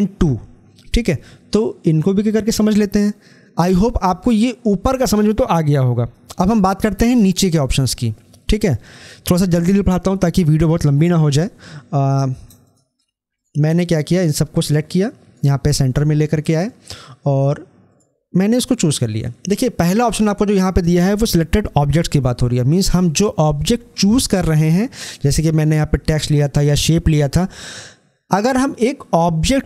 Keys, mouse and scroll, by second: 12.5-17.9 shift+drag.